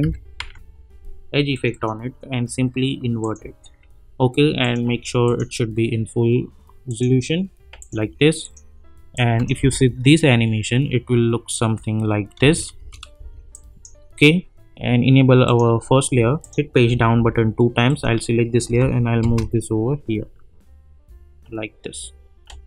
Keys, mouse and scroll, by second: 0.0-0.8 typing, 1.5 click, 9.5 space, 12.4 space, 13.5 click, 16.8 Page_Down, 17.9 click, 18.6 [, 19.2 space.